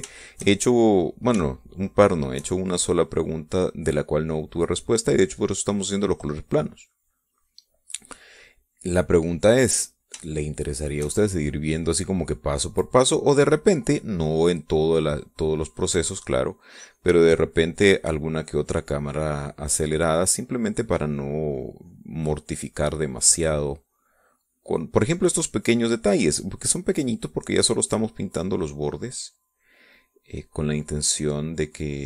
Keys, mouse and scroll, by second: 0.5 shift+click, 0.9 shift+click, 2.4 shift+click, 3.5-5.8 shift+drag, 8.0 click, 8.8-10.5 drag, 10.9 shift+middle click, 11.1-12.3 shift+drag, 13.3 click, 15.0-21.2 drag, 21.8-26.5 drag, 26.6 middle click, 26.6 click, 27.8-30.5 drag, 30.8-32.0 drag.